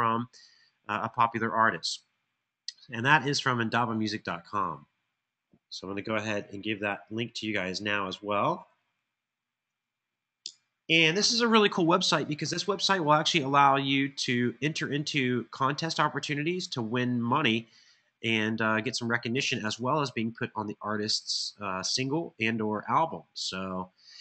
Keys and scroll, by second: 6.2 super+c, 9.4 super+v, 10.2 Return.